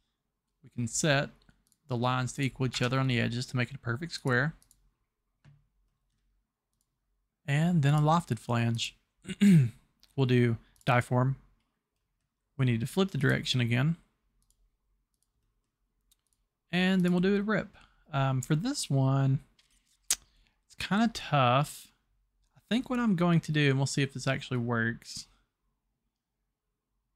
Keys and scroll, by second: 2.8 Escape.